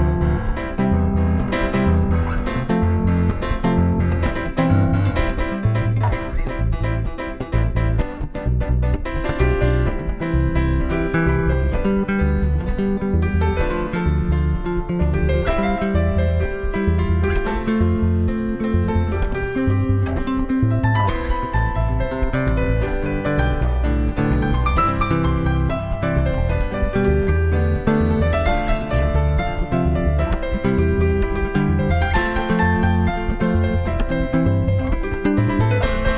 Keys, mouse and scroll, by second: 1.5-5.7 drag, 10.4-12.2 drag, 12.6-14.4 drag, 15.1-19.8 drag, 19.8 middle click, 19.9 click, 20.0 middle click, 26.2-28.0 drag, 30.5-32.1 drag, 34.2 v, 34.5 v.